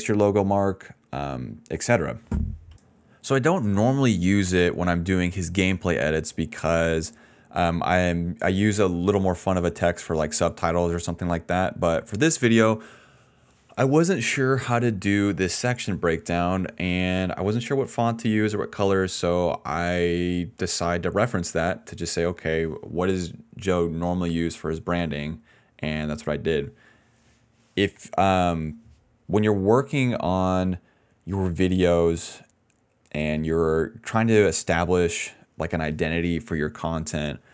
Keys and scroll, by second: 7.0 ctrl+z, 22.9-23.8 typing.